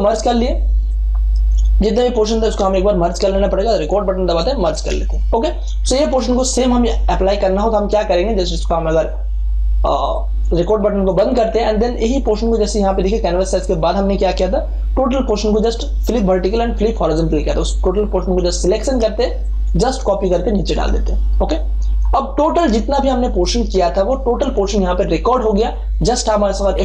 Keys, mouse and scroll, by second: 0.9-2.5 drag, 2.5 ctrl+alt+z, 3.7 click, 4.7 ctrl+e, 10.0-18.4 drag, 19.4-26.7 alt+drag, 26.7 F12.